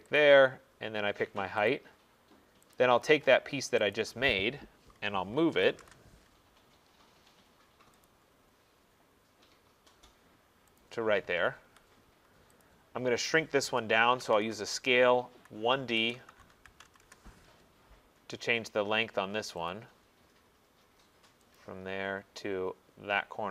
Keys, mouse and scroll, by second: 0.2 click, 2.8 click, 4.0 click, 4.4 middle click, 4.4 middle click, 4.6 middle click, 5.5-5.8 typing, 6.8 middle click, 6.8 middle click, 7.8 middle click, 8.1 click, 8.3 middle click, 9.0 middle click, 10.0 middle click, 10.8 click, 11.2 middle click, 11.3 middle click, 11.7 Escape, 12.7 click, 14.2-17.6 typing, 18.1 middle click, 19.7 click, 20.1 middle click, 21.6 click, 22.1 middle click, 22.1 middle click, 23.1 middle click.